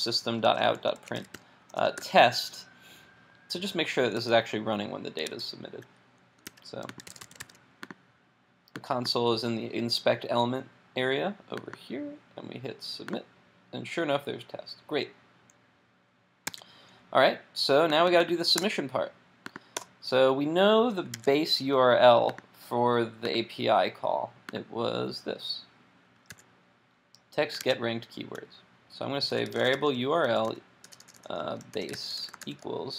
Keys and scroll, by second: 4.2 super+s, 5.4 super+Tab, 6.5 super+r, 16.5 super+Tab, 21.1 super+Tab, 26.3 super+c, 27.6 super+Tab.